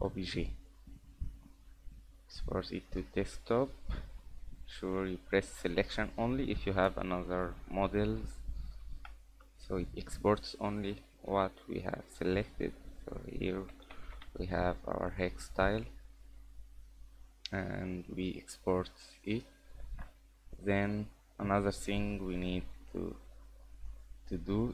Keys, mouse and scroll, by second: 18.0 click, 19.0-19.3 scroll down 5, 19.3 scroll up 3, 19.8 ctrl+s, 20.8 click, 23.8 scroll down 2, 24.1 scroll up 2.